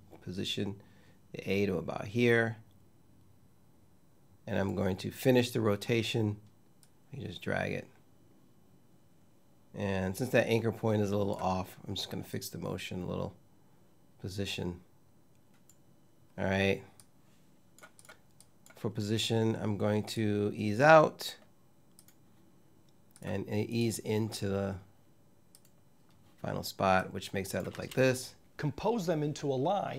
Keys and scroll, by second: 27.5 space.